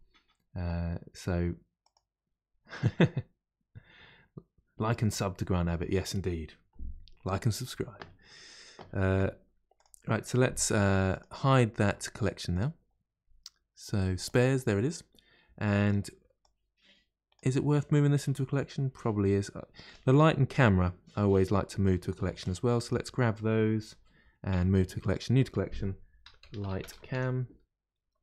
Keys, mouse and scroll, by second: 9.7 click, 11.1 click, 12.5 click, 14.2 click, 15.7 click, 16.4 click, 17.7-19.8 middle drag, 19.8 click, 21.2-21.7 scroll down 4, 22.4 drag, 24.5 m.